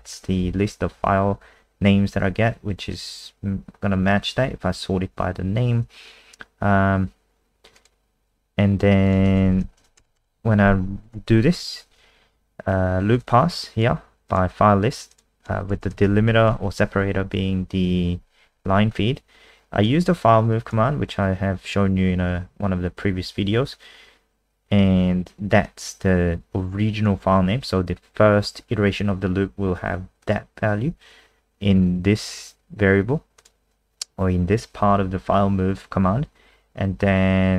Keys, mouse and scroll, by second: 7.8 click, 9.7 shift+Home, 10.0 BackSpace, 10.1 BackSpace, 11.1 ctrl+s, 13.2 click, 16.0 shift+Left, 16.1 shift+Left, 16.3 shift+Left, 16.5 shift+Left, 19.8 click.